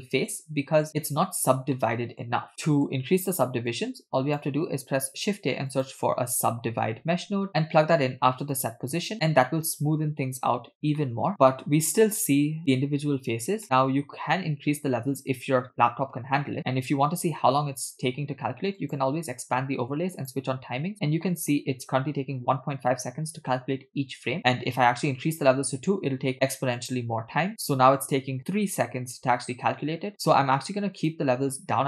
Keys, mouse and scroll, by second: 1.7-2.3 middle drag, 2.5 middle click, 2.5-3.0 scroll down 2, 3.7 click, 5.0 shift+a, 11.1 middle click, 11.6-13.6 scroll up 2, 13.6 middle click, 14.1-15.6 scroll up 1, 18.9-20.7 drag, 20.9-21.3 scroll up 2, 21.3 middle click, 24.2 scroll up 1, 26.9 click, 31.2-31.8 drag.